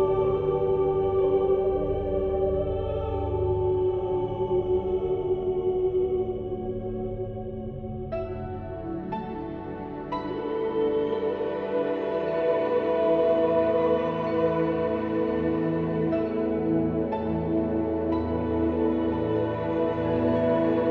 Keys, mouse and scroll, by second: 0.5 Tab, 1.0 click, 1.4 Tab, 1.9 ctrl+r, 2.6 ctrl+z, 3.0 ctrl+r, 4.3 ctrl+r, 5.2 Tab, 5.5 middle click, 6.2-7.4 middle drag, 8.0 middle click, 8.7 click, 9.5 h, 9.8 click, 10.5 alt+c, 11.1 Tab, 11.3 middle click, 11.6 KP_1, 13.3 middle click, 14.0 ctrl+r, 14.7 ctrl+z, 15.0 ctrl+r, 16.1 ctrl+r, 18.2 ctrl+KP_Add, 18.5 ctrl+z, 18.6 a, 19.7 a.